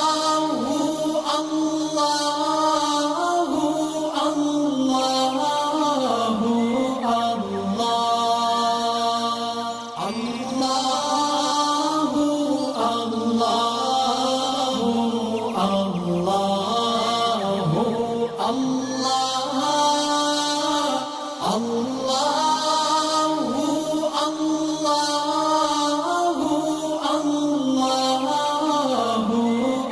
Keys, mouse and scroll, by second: 5.6 alt+scroll down 1, 6.8 click, 7.7 alt+scroll down 1, 8.1 space, 8.1 click, 8.4 alt+scroll up 1, 9.0 space, 9.2 click, 9.2 click, 9.4 space, 10.1 alt+scroll up 1, 10.6 alt+scroll down 2, 11.1 space, 11.1 click, 11.6 alt+scroll up 2, 12.1 space, 12.2-13.3 drag, 13.4 alt+scroll up 1, 14.3 click, 14.3 click, 16.5 click, 19.0-21.1 drag, 21.3 alt+scroll up 1, 23.0 click, 23.9 space, 24.0 click, 24.3 space, 24.6 alt+scroll down 1, 24.9 click, 25.3 alt+scroll up 1, 26.8-28.5 drag, 28.6 alt+scroll down 2, 28.7 space, 29.1 space.